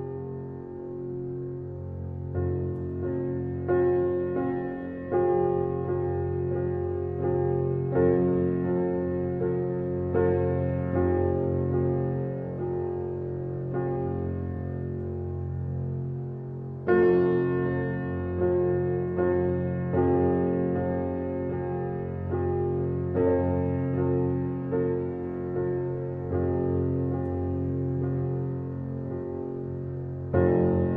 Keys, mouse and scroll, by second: 0.4 g, 4.7 KP_0, 5.4-6.8 middle drag, 6.8 g, 10.0-11.4 middle drag, 11.4 ctrl+z, 12.9 n, 19.2 click, 20.1-21.4 middle drag, 21.4 r, 24.4 click, 24.7-25.6 middle drag, 25.6 n, 26.1-26.5 scroll down 4, 26.5-26.9 middle drag, 26.9-29.6 scroll up 4, 29.6-30.9 drag.